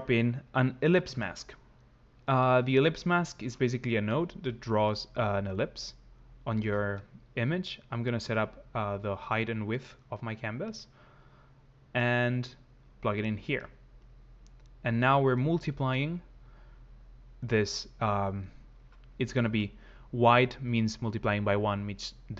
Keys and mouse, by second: 5.0 shift+click, 7.3 shift+click, 13.8 click.